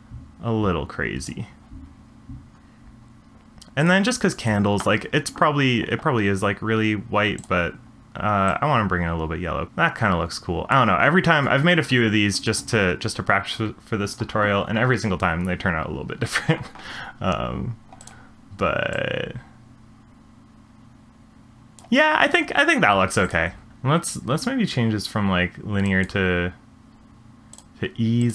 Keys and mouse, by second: 3.8 click, 4.4 click, 18.0 click, 23.2 click, 23.7-26.1 drag, 27.6-28.3 drag.